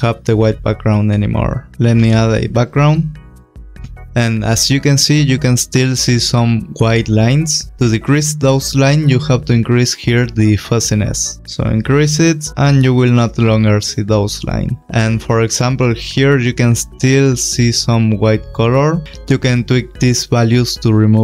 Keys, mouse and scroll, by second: 1.7 ctrl+y, 2.4 click, 5.3-6.6 scroll, 10.6 click, 14.7 click, 15.0 click, 20.8 click.